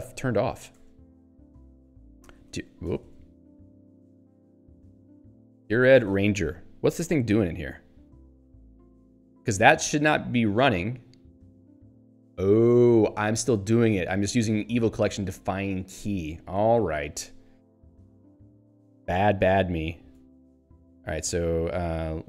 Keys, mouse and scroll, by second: 7.5 h, 13.9 h.